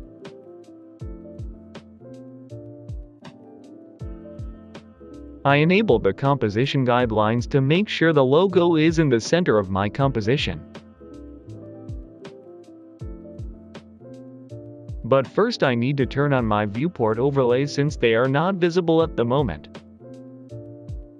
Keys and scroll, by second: 0.1 x, 1.4-2.5 typing.